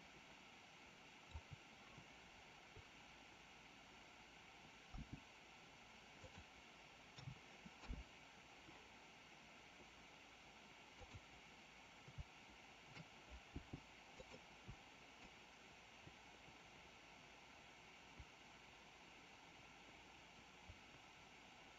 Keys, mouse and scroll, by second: 4.9 g, 7.0 a, 7.6 i, 10.8 click, 13.5 g, 15.1-21.7 drag.